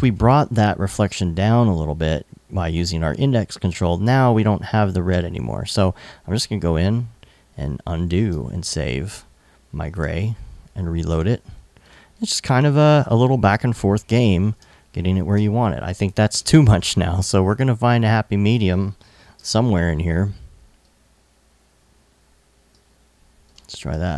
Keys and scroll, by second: 6.2 alt+super+z, 7.8 alt+super+s, 8.7 super+s, 9.5 super+Tab, 16.0 super+Tab, 18.8 super+l, 23.5 super+s, 23.8 super+Tab.